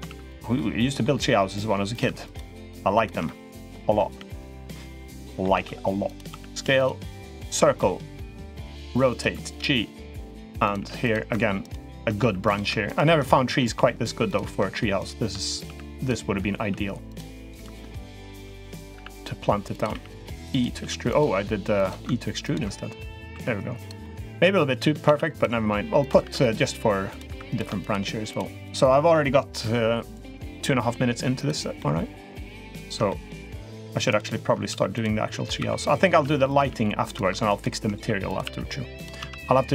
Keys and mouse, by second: 0.4 middle click, 1.0 3, 1.7 click, 2.1 shift+click, 2.4 shift+click, 2.8 shift+click, 3.0 middle click, 4.3 shift+click, 4.7 middle click, 5.3 e, 6.1 s, 7.3 click, 7.6-8.3 middle drag, 8.4 r, 9.0 g, 10.0 r, 10.6 g, 12.0 s, 13.1 middle click, 13.5 g, 15.5 s, 16.4 r, 17.0 g, 17.8 ctrl+right click, 18.1-21.0 typing, 23.1 s, 23.8 middle click, 24.8 ctrl+r, 26.1 ctrl+r, 27.1 3, 27.3 click, 27.6 shift+click, 28.1 shift+click, 28.5 shift+click, 31.1 click, 31.6 middle click, 32.8-33.4 middle drag, 34.5 s, 35.4 s, 36.0 r, 36.4 g, 37.8 s, 38.3 r, 39.0 z, 39.6 z.